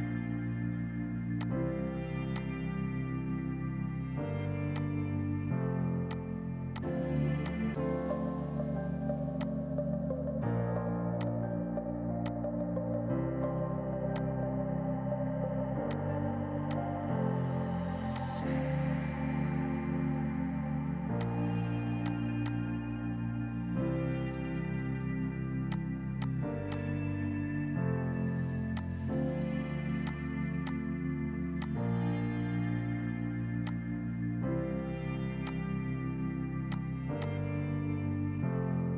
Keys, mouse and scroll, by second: 0.1 right click, 1.4 click, 3.7 right click, 4.7 shift+click, 6.0 click, 7.0 Delete, 7.4 click, 15.2 space, 15.9 click, 16.2 F3, 16.7 click, 17.2 right click, 18.1 click, 19.6 right click, 21.1 click, 31.0 r, 31.5 click, 31.9 F3, 32.6 F4, 33.4 F2, 33.6 click.